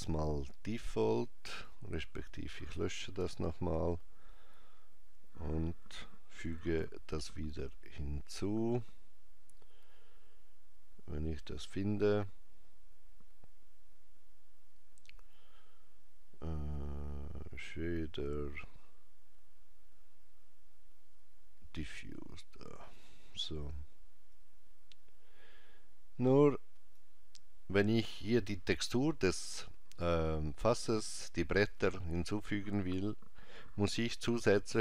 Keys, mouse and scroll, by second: 0.8 click, 3.2 Delete, 6.6 shift+a, 24.3 click, 33.9 shift+a.